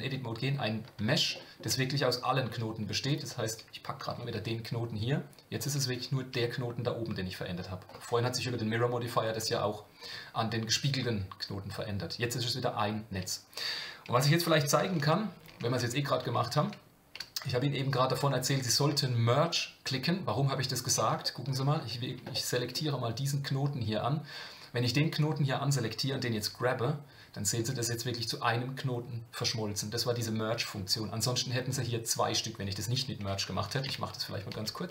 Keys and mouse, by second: 1.3 shift+middle click, 6.3 Tab, 14.5 Tab, 15.2 ctrl+z, 20.8 click, 21.2 shift+middle click, 22.3 shift+middle click, 24.9 middle click, 33.7-34.9 ctrl+z.